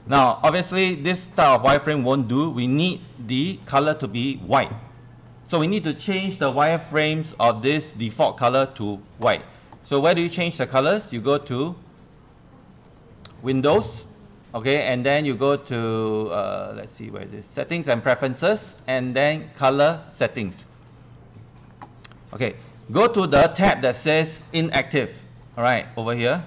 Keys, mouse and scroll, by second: 6.9 click, 13.8-24.2 drag, 24.9 ctrl+1, 25.6 click, 26.3 ctrl+click.